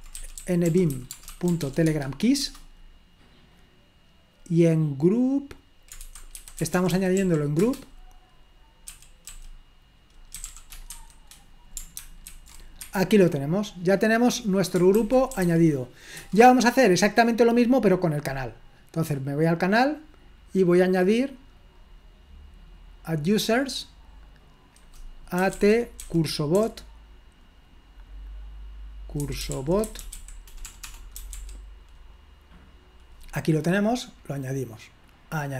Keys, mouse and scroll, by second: 0.0-2.1 typing, 2.4 Return, 6.1-7.7 typing, 8.9-9.3 typing, 10.4 typing, 12.1-12.8 typing, 12.9 Escape, 15.1-15.9 typing, 16.2 Return, 19.3 click, 21.7 click, 23.2 click, 25.4-26.6 typing, 29.0-31.8 typing, 34.0 click, 35.2 click.